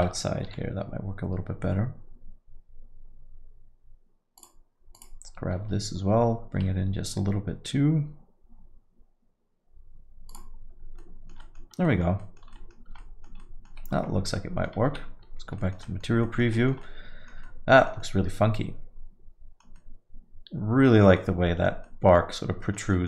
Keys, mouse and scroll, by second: 2.8 g, 8.6 g, 11.0 alt+middle click, 11.4 alt+middle click, 11.7 scroll down 1, 11.9 alt+middle click, 12.2 alt+middle click, 12.5 middle click, 12.8 scroll down 2, 13.0 alt+middle click, 13.4 alt+middle click, 14.4 Tab, 14.5 middle click, 14.9 z, 15.6 alt+middle click, 15.9 middle click, 16.3 alt+middle click, 16.6 middle click, 16.8 alt+middle click, 17.5 alt+middle click, 18.0 alt+middle click, 19.8 alt+middle click, 21.2 alt+middle click, 21.9 alt+middle click, 22.9 middle click.